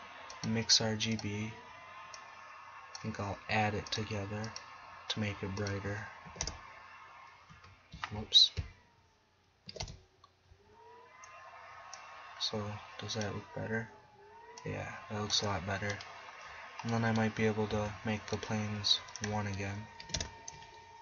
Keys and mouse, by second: 1.3 click, 7.5 KP_1, 17.8 z.